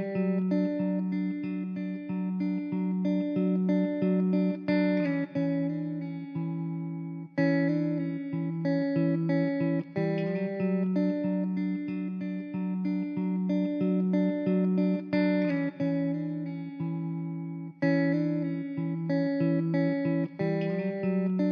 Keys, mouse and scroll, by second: 0.9 click, 1.2 ctrl+r, 1.8 click, 2.0 middle click, 3.4 click, 3.6 middle click, 4.1 3, 4.2 click, 4.9 i, 5.6 click, 5.8 ctrl+z, 6.2 Tab, 6.4 right click, 6.8 Tab, 7.5 i, 8.4 click, 8.6 Tab, 9.4 Tab, 10.2 ctrl+r, 11.0 click, 11.5 ctrl+r, 12.2 click, 12.3 scroll up 2, 13.2 ctrl+r, 14.2 shift+middle click, 14.2 click, 14.7 ctrl+r, 15.5 click, 15.8 Tab, 16.2 click, 16.5-16.8 right drag, 17.0 Tab, 17.1 scroll down 1, 17.4 click, 17.6 middle click, 17.9 click, 18.2 middle click, 19.0 `, 19.6 alt+z, 20.0-20.4 drag, 20.6-20.9 middle drag, 21.2 alt+z, 21.3-21.5 middle drag.